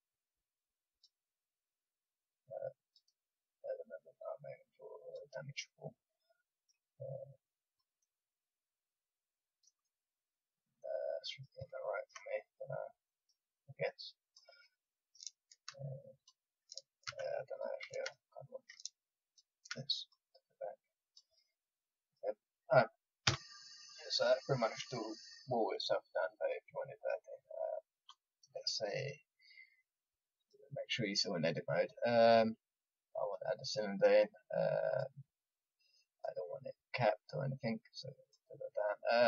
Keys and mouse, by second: 5.8 click, 5.8 click, 7.7-9.8 drag, 14.2-22.0 drag, 23.2 a, 23.5-26.3 middle drag, 26.9 middle click, 27.6 middle click, 27.9-37.4 drag, 38.2-39.2 drag.